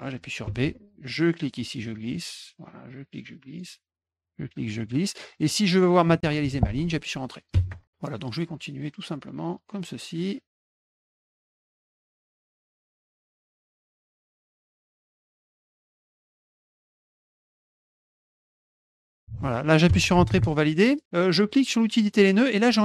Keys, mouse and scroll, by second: 1.1-2.1 drag, 2.9 click, 4.2 click, 5.2 middle click, 7.5 Return, 8.2 click, 9.8 click, 10.5 drag, 10.6 middle click, 10.8 click, 10.9 click, 11.1 middle click, 11.2 click, 11.4 click, 11.6 click, 11.7 click, 11.8 click, 11.9 click, 12.0 middle click, 12.2 click, 12.3 click, 12.5 click, 12.7 click, 12.8 click, 13.0 click, 13.2 middle click, 13.3 click, 13.5 click, 13.6 middle click, 13.8 click, 13.9 click, 14.0 middle click, 14.2 click, 14.3 click, 14.4 middle click, 14.5 click, 14.7 click, 14.8 middle click, 14.9 click, 15.1 click, 15.1 middle click, 15.2 click, 15.4 click, 15.5 click, 15.7 middle click, 15.8 click, 16.0 click, 16.1 click, 16.3 middle click, 16.4 click, 16.6 click, 16.7 middle click, 16.8 click, 16.9 click, 17.1 click, 17.2 middle click, 17.4 click, 17.5 click, 17.7 click, 17.8 click, 18.0 click, 18.2 click, 18.5 middle click, 18.6 click, 18.9 click, 19.8 Return, 21.6 click.